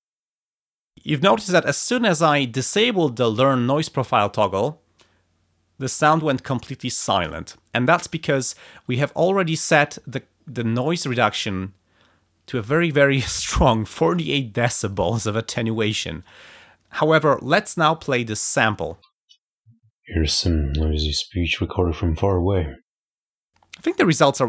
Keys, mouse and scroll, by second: 16.2 ctrl+click, 16.6 ctrl+scroll down 2, 18.5 click, 18.9 space, 23.1 space.